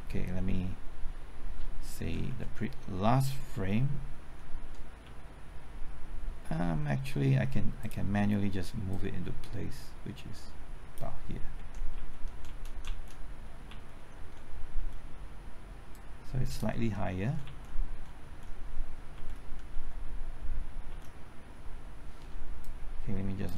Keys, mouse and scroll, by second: 3.5 Left, 4.4 Left, 4.5 Right, 5.0 Left, 7.8-11.5 drag, 11.5 Right, 11.9-12.6 typing, 12.8 Left, 13.1 Right, 13.7 typing, 14.1 Right, 14.7 Left, 15.9-16.9 drag, 17.2-19.6 typing, 20.9 Left, 22.0-22.8 typing, 22.6 shift+click.